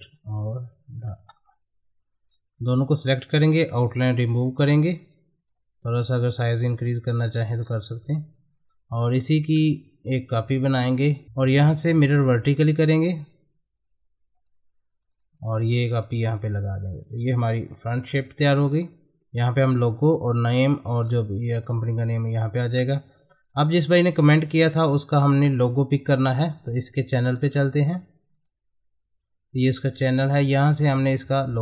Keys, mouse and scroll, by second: 1.1 space, 2.6-4.0 drag, 4.0 right click, 4.4 middle click, 5.1-7.6 drag, 7.6-8.0 scroll down 1, 8.0-10.5 drag, 10.5 ctrl+right click, 12.4-17.9 drag, 17.9 shift+F2, 18.5 click, 21.0-21.7 scroll down 1, 21.7-23.0 drag, 23.0 F4, 23.4 click, 27.3 middle click, 28.3 click.